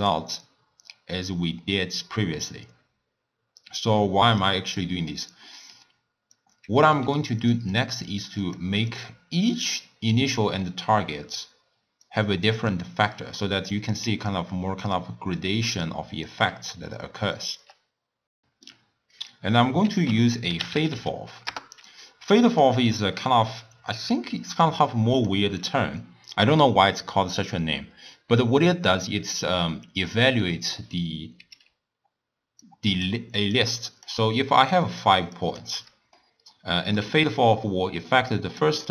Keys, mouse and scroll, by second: 4.8-6.3 middle drag, 6.3 drag, 6.9 g, 7.8 click, 8.4 click, 12.1-14.0 drag, 14.0-15.0 d, 15.0-16.3 drag, 16.3 d, 16.7 right click, 17.6 d, 18.3 middle click, 18.8 scroll up 1, 19.0 scroll down 1, 19.8 ctrl+a, 22.8-23.6 middle drag, 23.6 drag, 24.6 drag, 26.3-29.3 drag, 31.7-35.6 typing, 32.6 click, 33.5 click, 34.8 click, 35.3 click, 36.2-37.0 middle drag, 37.0-38.9 typing, 38.3 click.